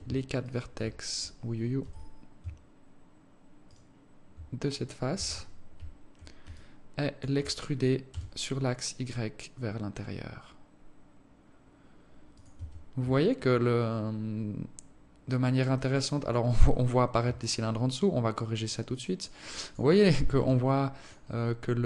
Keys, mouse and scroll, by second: 0.8 shift+right click, 2.2 z, 4.0 shift+right click, 5.5 z, 6.9 alt+click, 8.5 e, 13.0 Tab, 13.5 alt+click, 17.8 alt+click, 19.3 alt+click, 19.8 alt+click, 20.9 alt+click.